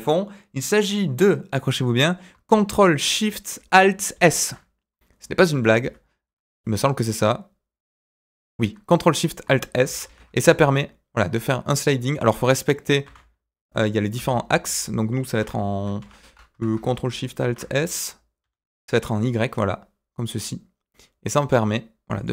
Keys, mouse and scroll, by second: 4.1 ctrl+alt+shift+s, 8.9 middle click, 10.0 ctrl+alt+shift+s, 16.5 KP_1, 17.4 ctrl+alt+shift+s.